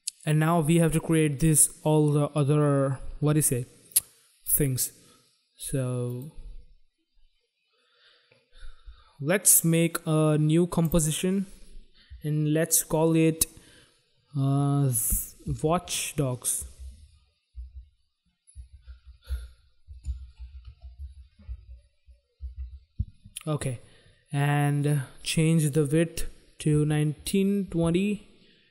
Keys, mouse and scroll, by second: 6.0 click, 10.5 click, 15.4-22.8 typing, 25.2 click, 26.5-28.2 typing.